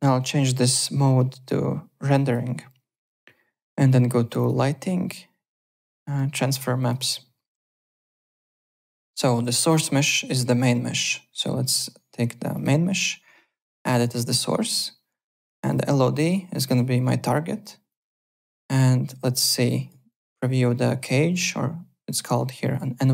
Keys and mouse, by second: 2.1 click, 4.3 click, 6.8 click, 7.7 middle click, 8.0 alt+click, 8.7 click, 8.9 alt+middle click, 9.2 alt+right click, 12.5 click, 13.9 click, 15.6 click, 16.6 click, 17.9 click, 18.7 click, 19.6 alt+click, 21.0 alt+click, 22.2 click.